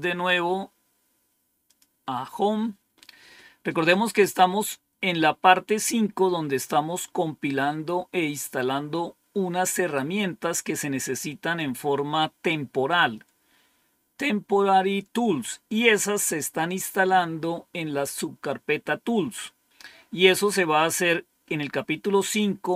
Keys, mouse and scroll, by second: 1.6 click, 3.1-4.1 scroll down 2, 4.1-4.6 scroll down 1, 4.6-6.1 scroll down 1, 21.6-22.5 scroll down 1.